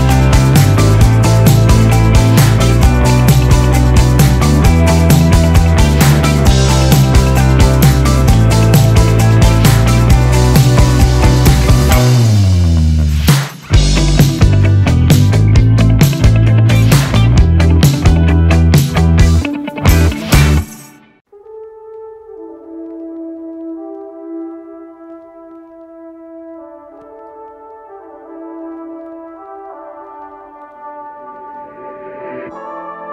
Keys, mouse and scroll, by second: 0.8 space, 5.5 click, 6.1 space, 8.7 click, 11.7 r, 12.6-14.2 drag, 15.0 Return, 17.0 typing, 17.2-24.7 drag, 25.6 Return, 28.3-33.1 drag, 29.1 0.